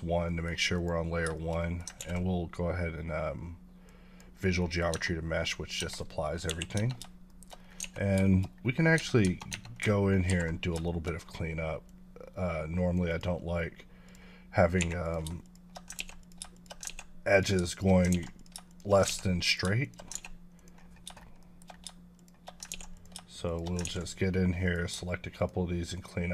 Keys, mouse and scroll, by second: 0.3 middle click, 0.8 click, 1.4 shift+middle click, 2.0 ctrl+a, 3.9 click, 4.6 middle click, 4.9 Tab, 6.5 KP_1, 6.8 Tab, 7.3 shift+middle click, 7.6 scroll up 3, 7.8 a, 8.2 shift+middle click, 8.5 scroll up 1, 8.9 Tab, 9.5 Tab, 10.3 alt+w, 10.8 shift+middle click, 11.2-11.7 scroll down 1, 11.9 click, 13.1 double click, 13.5-14.0 scroll up 3, 14.0 click, 14.8 2, 15.0 click, 15.4 shift+click, 16.1 x, 16.2 click, 16.5 shift+click, 16.9 ctrl+x, 17.3 click, 17.7 shift+click, 18.1 ctrl+x, 18.3 click, 18.7 shift+click, 19.5 click, 19.8 shift+click, 20.5 click, 21.4 shift+middle click, 22.2 shift+click, 22.7 ctrl+x, 22.9 click, 23.5 shift+click, 24.6 click, 25.4 shift+click, 25.9 shift+double click.